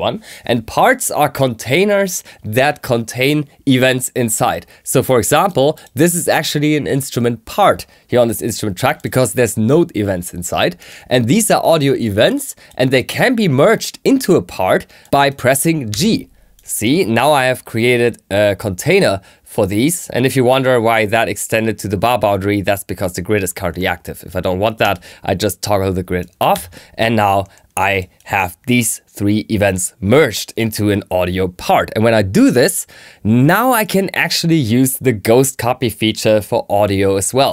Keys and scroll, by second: 15.8 g, 26.4 g.